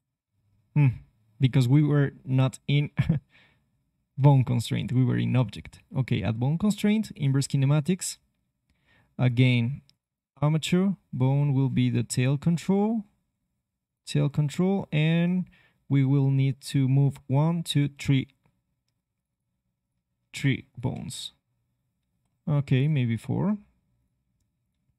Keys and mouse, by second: 16.1-18.1 middle drag, 19.1-24.4 drag, 20.9 g.